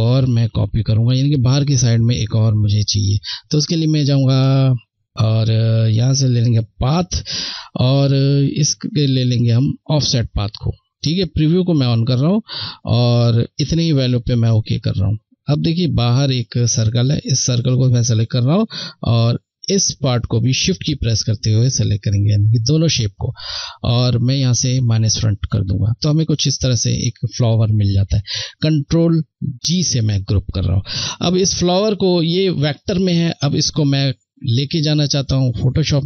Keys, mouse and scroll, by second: 2.7 click, 8.9 click, 9.0 click, 15.8 click, 18.8 shift+click, 24.1 click, 29.5 ctrl+g, 30.6 click.